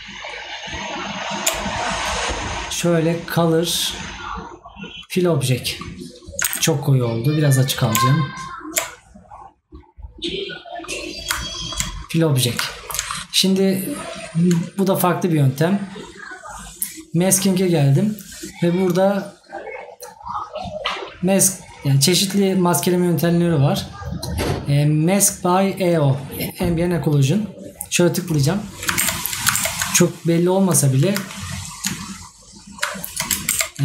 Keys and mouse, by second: 11.6 right click.